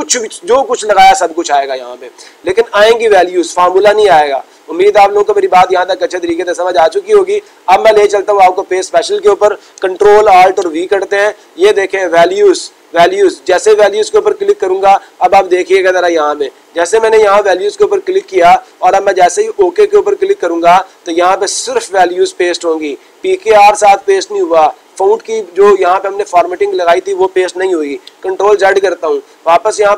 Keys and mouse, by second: 8.1 click, 13.4 click, 14.4 click, 21.6-22.7 drag.